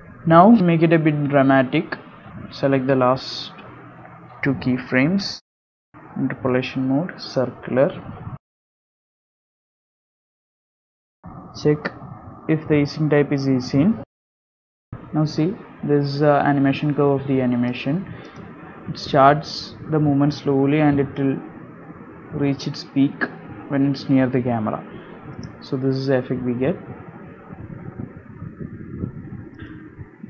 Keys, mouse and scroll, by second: 0.1 KP_Decimal, 0.5-1.3 scroll down 16, 1.2-1.5 scroll up 6, 2.0 click, 2.3 click, 3.2 click, 4.1 space, 4.6 click, 5.7 KP_Decimal, 6.5 scroll down 1, 7.1 scroll down 5, 7.4 right click, 11.1 space, 11.2 right click, 13.2 right click, 16.9 click, 19.9 click, 20.1 space, 20.8 space, 21.2 click, 27.9 space.